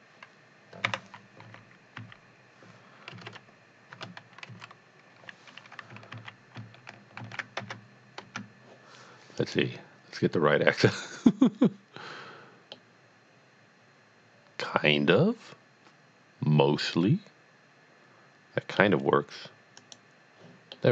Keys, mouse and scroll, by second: 0.8 r, 1.4 z, 1.9 z, 3.1 KP_0, 4.0 KP_Enter, 4.5 KP_1, 6.1 ctrl+z, 6.6 ctrl+z, 7.2 ctrl+z, 7.7 Tab, 8.2 Tab, 9.4 click, 10.8 click, 12.7 middle click, 19.8 click, 20.7 middle click.